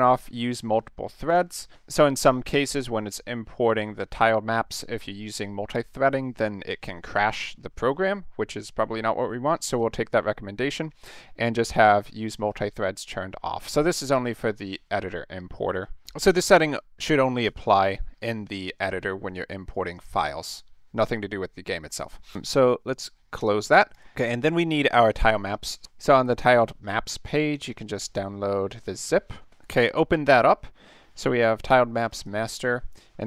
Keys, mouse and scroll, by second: 19.9 click, 23.4 click, 23.9 click, 25.1 middle click, 25.4-25.8 middle drag, 27.7 click, 30.3 click, 32.0 click, 32.1 click, 32.9 click.